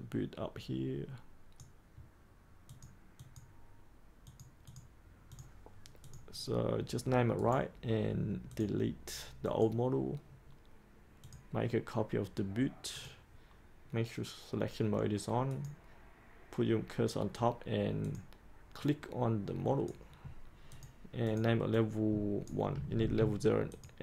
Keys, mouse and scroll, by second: 7.3 right click, 8.4-22.7 drag, 22.9 ctrl+c, 23.6 click.